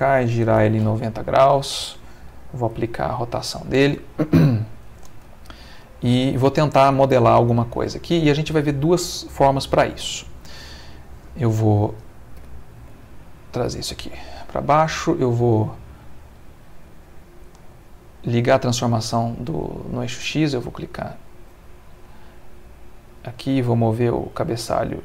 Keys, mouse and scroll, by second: 0.5 r, 0.8 9, 0.8 0, 1.5 Return, 2.7 ctrl+a, 3.3 ctrl+click, 4.6 click, 5.4 ctrl+middle click, 6.0 ctrl+middle click, 7.3 ctrl+shift+click, 7.5 ctrl+shift+click, 7.6 shift+middle click, 10.0 Tab, 10.9 click, 12.3 g, 12.8 z, 14.0 click, 15.3 click, 15.9 click, 20.8 right click, 21.9 Escape, 23.3 right click.